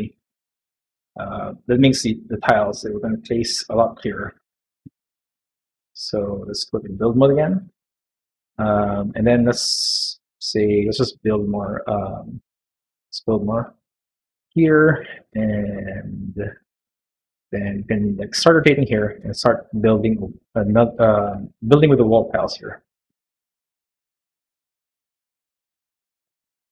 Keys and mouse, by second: 0.2 shift+middle click, 2.9 middle click, 6.6 click, 7.6-9.9 middle drag, 10.3 click, 10.7 click, 11.1 click, 11.7 click, 12.1 middle click, 15.0 middle click, 17.6-19.1 middle drag, 20.6 middle click, 22.3 click, 22.9 click, 23.3 click, 23.8 click, 25.8 click.